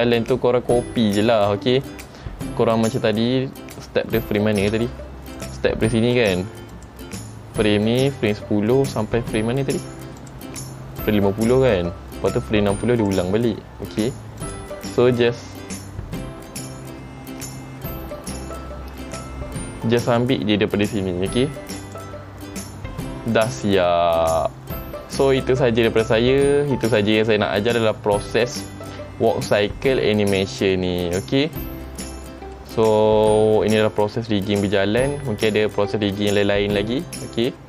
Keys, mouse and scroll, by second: 4.8 space, 5.5 click, 6.4 click, 6.9 click, 10.4 click, 11.2 click, 14.6 click, 20.4 click, 31.2 scroll down 1, 32.7 middle click, 34.7 middle click, 35.7 shift+middle click, 36.2 shift+middle click.